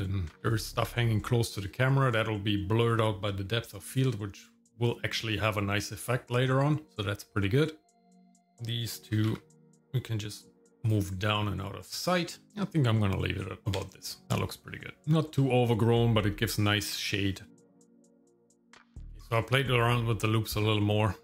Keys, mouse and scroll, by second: 0.4 KP_0, 8.2 click, 9.1 g, 13.6 ctrl+click, 20.0 middle click.